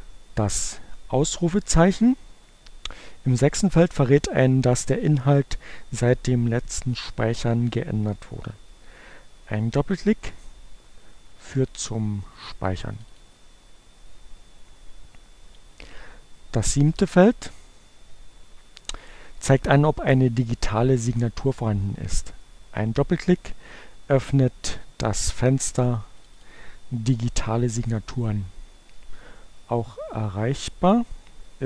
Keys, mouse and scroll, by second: 12.3-13.6 drag, 25.3-26.9 drag, 30.8 click.